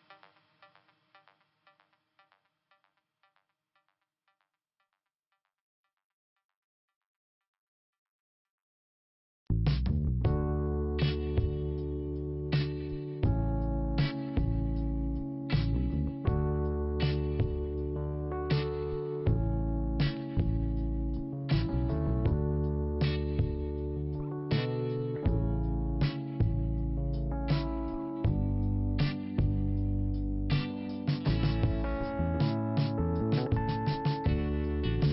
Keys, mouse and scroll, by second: 1.2 right click, 1.2 right click, 2.4 click, 2.5 click, 3.8 click, 3.9 click, 4.8 click, 5.0 click, 5.3 right click, 5.4 right click, 5.8 right click, 5.9 double right click, 6.2 double right click, 6.3 double right click, 6.8 click, 6.9 click, 7.9 click, 8.2 click, 8.4 click, 8.6 click, 9.0 scroll down 2, 9.3 right click, 11.9 click, 12.5 middle click, 14.0 click, 14.1 click, 15.1 click, 25.3 click, 30.8 scroll up 2, 31.7 click, 33.6 click.